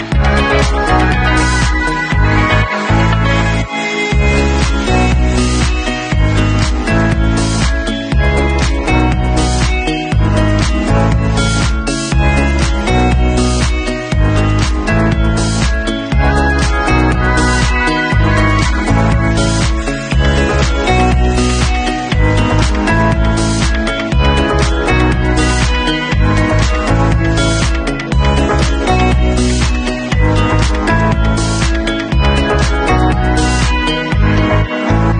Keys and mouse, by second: 5.9 middle click, 6.3-12.4 drag, 12.4-13.5 middle drag, 13.5 click, 16.7-20.1 middle drag, 20.1 click, 20.5 click, 23.9 click, 24.8 ctrl+c, 27.3-34.1 drag, 31.9 shift+z, 34.1 alt+middle click, 34.3-35.1 alt+drag.